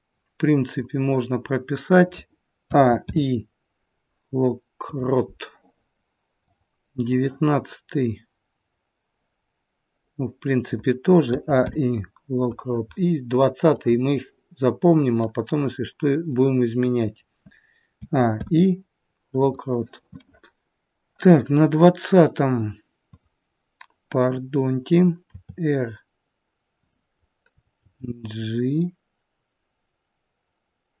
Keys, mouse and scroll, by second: 2.6 a, 3.0 i, 6.5 click, 11.2 a, 11.5 i, 13.8 click, 17.9 a, 18.2 i, 22.9 click, 25.2 r, 27.7 g.